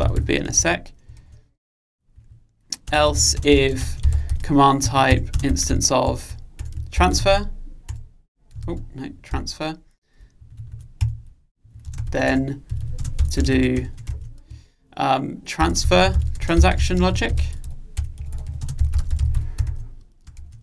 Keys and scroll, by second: 7.1 Return, 11.3 super+z, 13.6 Return.